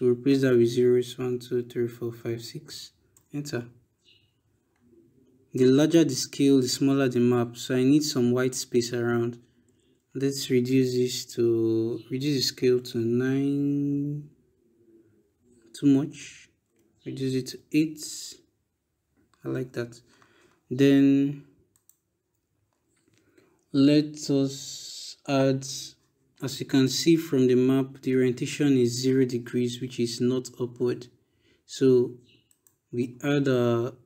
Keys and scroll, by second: 0.8 0, 2.9 Return, 9.5 BackSpace, 12.5 9, 13.4 Return, 16.5 BackSpace, 17.3 8, 18.0 Return.